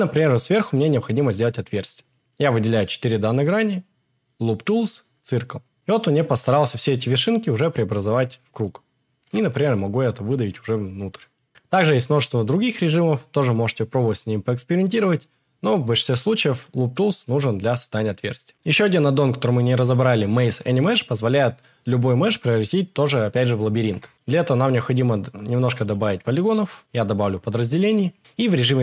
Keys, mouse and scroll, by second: 3.4-9.6 right drag, 9.6 e, 10.2 click, 10.9 Tab, 11.5 Tab, 11.5 a, 13.2-18.5 right drag.